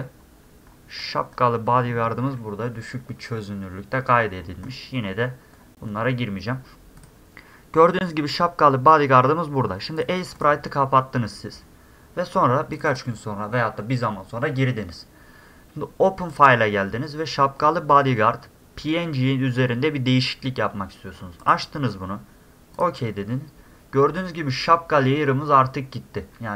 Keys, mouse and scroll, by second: 0.0 middle click, 0.4-6.1 middle drag, 3.5-6.1 scroll down 1, 7.0 click, 10.0 click, 10.4 click, 12.7 click, 12.9 click, 16.3 click, 21.4 click, 22.8 middle click, 23.8 middle click.